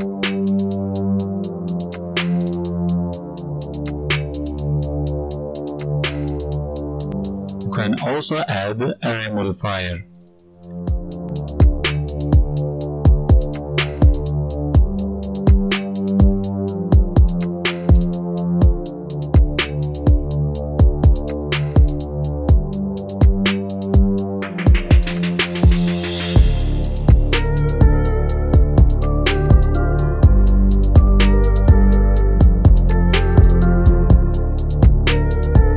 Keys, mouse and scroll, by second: 0.1 click, 10.0-11.1 scroll down 8, 11.1 click, 11.1-11.8 scroll down 5, 11.8 space, 16.3 right click, 16.8 alt+right click, 17.2 scroll up 1, 17.5 alt+right click, 19.8-20.9 scroll up 10, 20.9 click, 20.9-21.5 scroll up 1, 22.3-23.3 scroll down 18, 23.8 click, 24.5 click, 26.9 click, 29.7 click, 30.4 right click, 31.6-32.4 scroll up 2, 32.4 space, 32.8 click, 33.6 click, 34.6 click, 35.4 scroll up 4, 35.6 alt+right click.